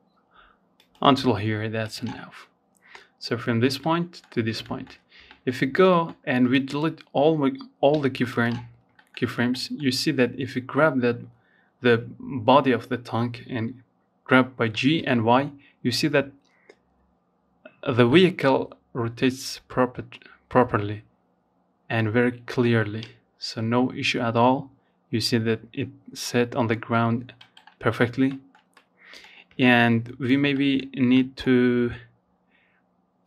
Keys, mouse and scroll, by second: 0.0 click, 0.6 scroll down 1, 2.0 middle click, 2.4-2.8 scroll up 1, 2.8 shift+middle click, 3.0-4.7 scroll up 2, 3.4 shift+middle click, 4.7-6.1 drag, 6.1 x, 7.1 shift+middle click, 7.3-7.7 scroll up 1, 7.7-27.4 middle drag, 27.4-27.8 scroll up 3, 27.8-29.0 shift+middle drag, 29.0 scroll up 1, 29.3-30.3 shift+middle drag, 30.3-30.7 scroll down 4, 31.4 click, 32.7-33.2 scroll up 5.